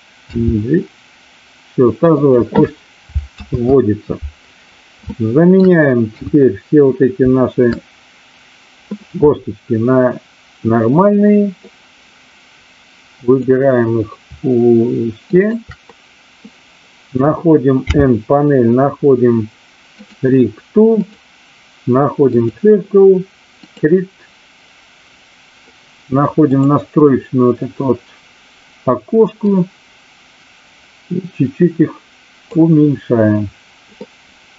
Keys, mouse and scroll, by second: 0.3 g, 2.1 click, 3.3 ctrl+z, 5.0-5.7 shift+middle drag, 6.0 KP_3, 11.6-13.4 drag, 15.4 shift+click, 17.7 n, 21.1-22.5 drag, 23.5 click, 29.4-32.4 drag, 34.1-34.5 middle drag.